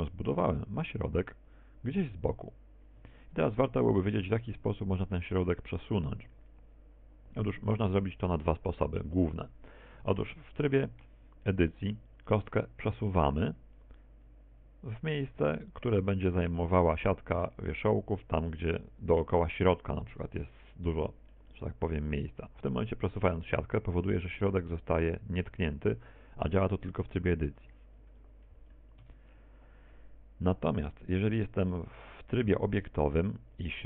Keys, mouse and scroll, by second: 0.2 r, 1.7 right click, 2.7 r, 5.9 shift+middle click, 6.5 middle click, 10.2 KP_1, 12.0 Tab, 12.6 a, 15.0 click, 22.2 Tab, 23.0 middle click, 23.5 middle click, 24.7 Tab, 25.8 g, 30.1 KP_1, 31.0 Tab, 33.5 Tab.